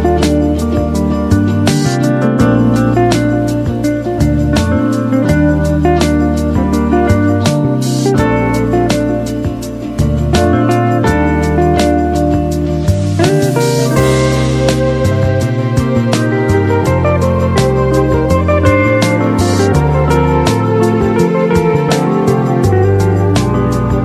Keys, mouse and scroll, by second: 1.0 ctrl+w, 4.6 ctrl+w, 7.1-12.1 drag.